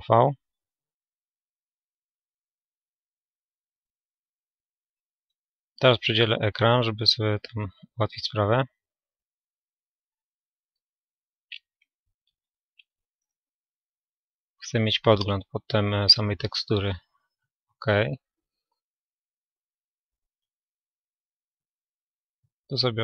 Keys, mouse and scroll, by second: 1.6 a, 3.5 a, 8.5-11.6 right drag.